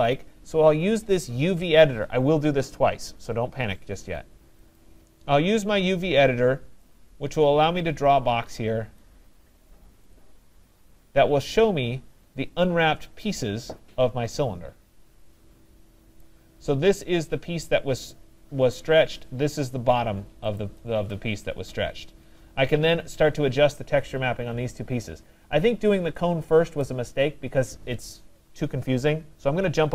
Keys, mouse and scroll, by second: 4.8 click, 9.0 click, 10.1 click, 11.7 middle click, 11.8 middle click, 11.9 middle click, 14.1 middle click, 16.2 right click, 18.4 middle click, 18.5 middle click, 19.7 click, 20.6 click, 25.2 middle click, 25.3 middle click, 26.9 right click, 27.3 middle click, 27.3 middle click, 27.4 middle click.